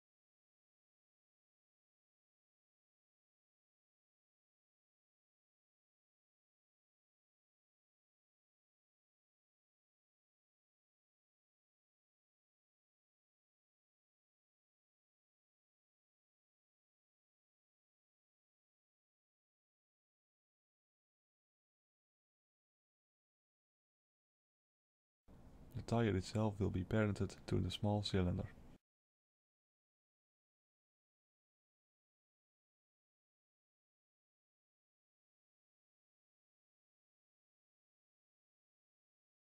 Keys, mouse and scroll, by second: 8.3 KP_7, 9.5 shift+z, 10.8 s, 15.1 middle click, 16.4 shift+middle click, 16.8 shift+scroll up 1, 17.6 ctrl+a, 19.4-20.2 scroll up 4, 20.2 click, 21.1 ctrl+a, 22.8 click, 23.5 ctrl+a, 25.6 click, 27.0 shift+click, 28.7 ctrl+p, 32.0 click, 33.2-33.7 scroll down 2, 34.0 shift+z, 34.7 Tab, 35.2 middle click, 36.5 2, 37.2 alt+click, 38.0 alt+shift+click, 39.2 ctrl+b.